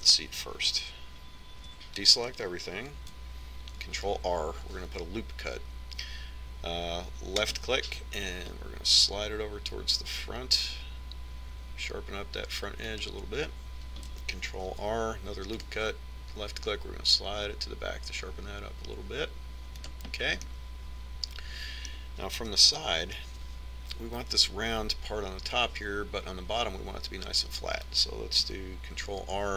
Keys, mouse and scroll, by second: 2.1 a, 4.3 ctrl+r, 15.2 ctrl+r, 21.0-22.8 middle drag, 22.9 KP_1.